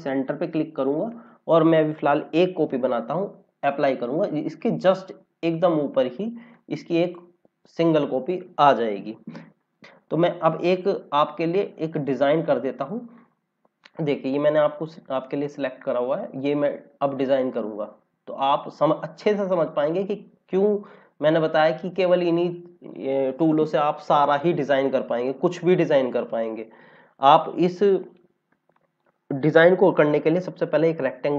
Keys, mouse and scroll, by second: 0.0 click, 5.0 scroll up 1, 5.8 scroll down 1, 6.4 click, 9.8 scroll down 1, 11.9 click, 21.8 scroll up 1, 24.2 scroll down 1, 30.7 click.